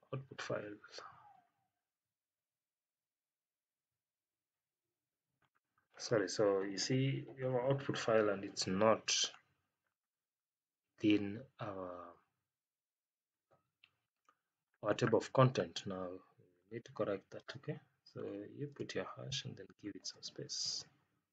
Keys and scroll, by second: 18.6 space, 19.9 space.